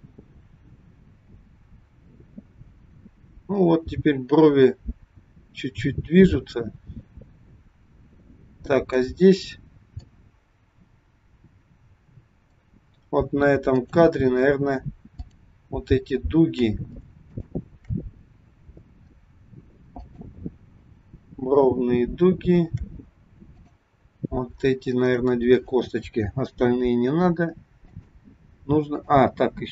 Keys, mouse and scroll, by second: 10.2 click, 13.7 click, 15.1 click, 16.2 scroll up 2, 17.2 shift+click, 23.5 click, 24.9 shift+click, 26.7 g, 28.9 click.